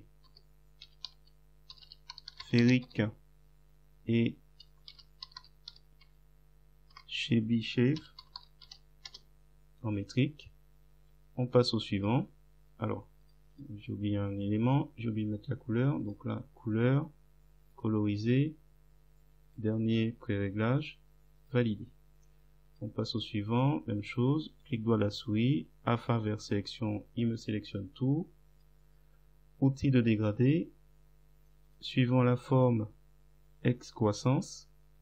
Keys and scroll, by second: 0.3-3.2 typing, 4.7-9.2 typing.